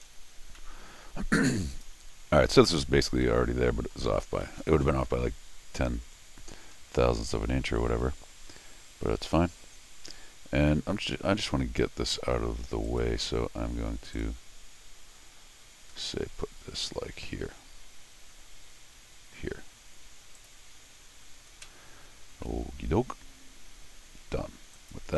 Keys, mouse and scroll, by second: 0.6 middle click, 1.7 click, 3.2 middle click, 4.4 middle click, 6.7 scroll up 1, 8.5 scroll down 1, 12.9 click, 13.4 scroll up 1, 14.1 click, 20.4 click, 22.5 middle click, 24.7 click.